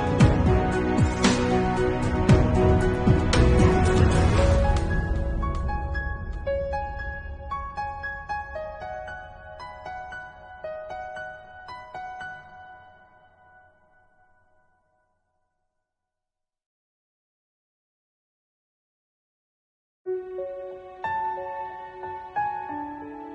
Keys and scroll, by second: 3.0 Left, 7.2 BackSpace, 7.3 8, 7.4 Return, 7.7 ctrl+s, 9.0 space, 12.0 p, 19.8 ctrl+alt+z.